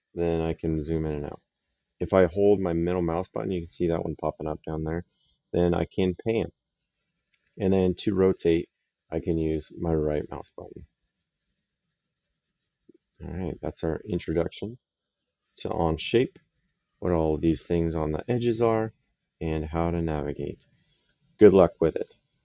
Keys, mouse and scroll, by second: 1.3 middle click, 4.7 middle click, 9.2 right click.